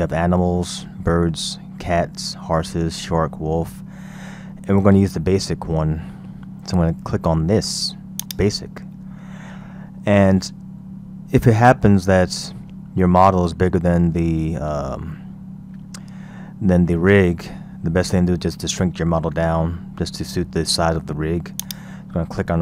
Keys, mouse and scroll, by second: 9.6-10.0 scroll down 2, 10.3-12.1 scroll down 1, 12.1-15.3 scroll down 3, 16.8-17.5 scroll up 3, 17.5-20.5 scroll down 1, 21.7 click.